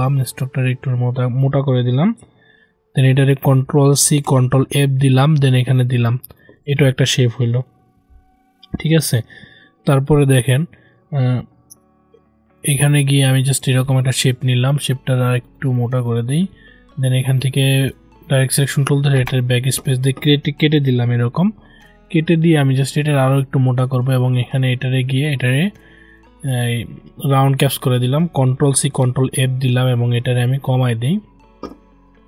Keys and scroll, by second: 4.0 ctrl+c, 4.3 ctrl+f, 28.4 ctrl+c, 28.8 ctrl+f.